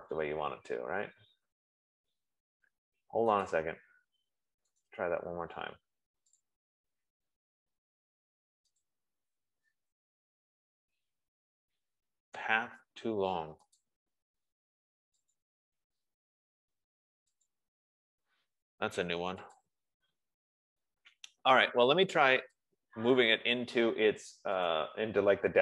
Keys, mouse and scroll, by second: 0.2 click, 4.1 click, 5.3 right click, 7.1 click, 9.3 click, 14.2 click, 15.7 click, 17.8 click, 20.1 click, 23.2 click, 24.8 F15, 25.1 right click.